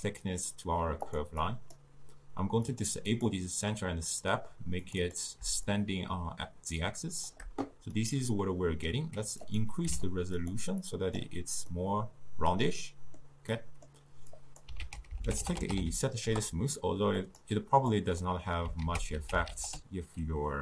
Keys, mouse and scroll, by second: 8.0 scroll up 2, 8.2-10.4 middle drag, 10.4-11.7 drag, 11.7 scroll up 2, 11.8-17.3 middle drag, 17.3 ctrl+a.